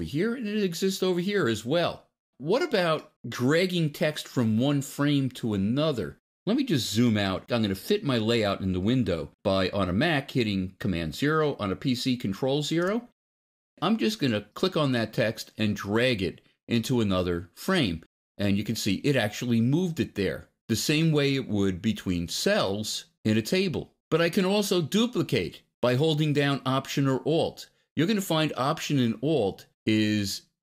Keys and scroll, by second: 11.0 super+0.